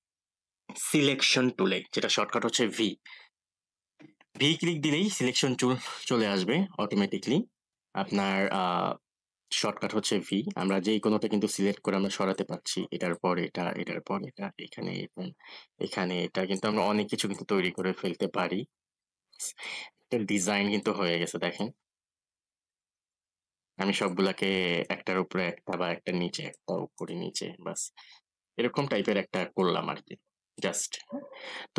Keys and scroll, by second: 2.9 v, 9.8 v.